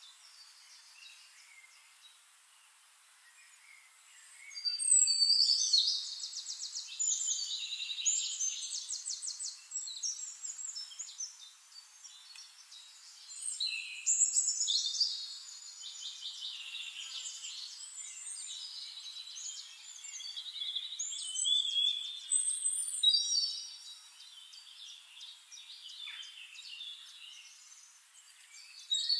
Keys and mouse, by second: 0.1 shift+click, 1.8-4.3 drag, 5.5-7.7 ctrl+drag, 7.4 Return, 13.3 click, 14.8 ctrl+click, 15.5 Return, 18.1-20.3 drag, 20.0 Return, 21.2 click, 22.7 shift+click, 24.4 click, 25.8-29.1 drag.